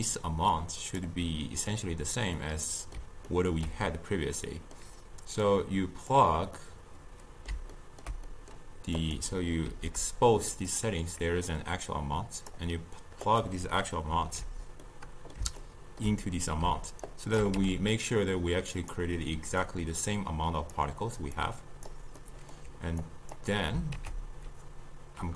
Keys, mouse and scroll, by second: 0.6-2.5 drag, 2.5-5.5 middle drag, 5.5 click, 6.6-9.1 middle drag, 9.1 click, 9.7 ctrl+h, 10.8-13.5 drag, 14.1 ctrl+h, 14.9-17.1 middle drag, 17.1 shift+right click, 17.6 g, 19.7 click, 21.4 click, 22.3-23.1 middle drag, 23.1-24.1 drag, 24.1 ctrl+a.